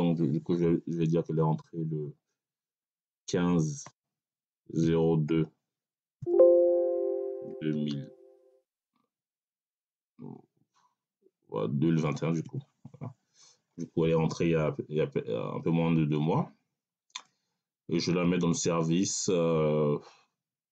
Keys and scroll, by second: 3.2-6.1 typing, 7.4 2, 7.6 0, 9.6 2, 12.3 1.